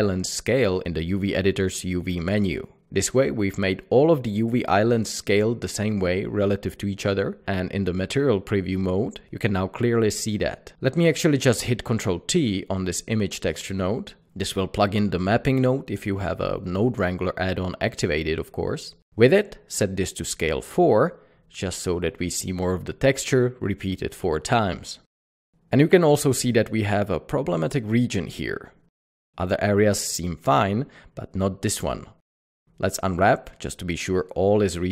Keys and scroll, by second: 4.5 Tab, 13.6 ctrl+t, 19.6 Return, 21.1 alt+a, 30.1 alt+a, 30.2 Tab, 32.1 Tab, 32.8-33.3 typing, 34.0 Tab.